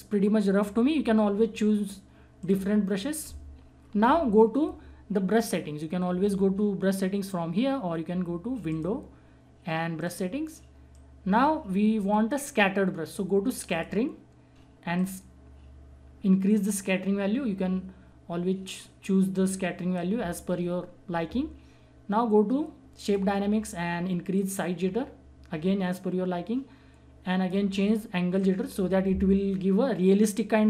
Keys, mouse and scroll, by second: 2.4 click, 3.9 [, 4.0 [, 8.6-22.3 drag, 23.0-30.6 drag.